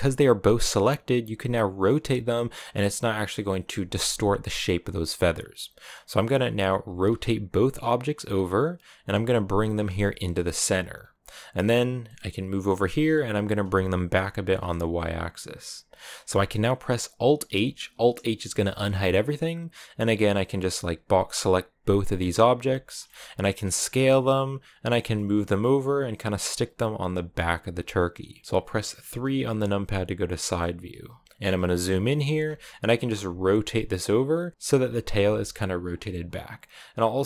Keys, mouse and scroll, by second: 1.0 r, 6.7 r, 8.9 g, 9.6 scroll up 2, 9.9 g, 11.1 middle click, 11.4-11.9 scroll down 5, 11.9 middle click, 12.8 g, 17.3 alt+h, 18.2 a, 18.6 middle click, 19.0-21.2 scroll up 2, 21.2 click, 21.8 scroll down 2, 22.0-23.3 middle drag, 23.3 s, 24.7 g, 26.6-29.1 middle drag, 29.1 KP_3, 31.2-31.8 scroll up 5, 31.8-33.1 shift+middle drag, 33.1 r, 36.4 s.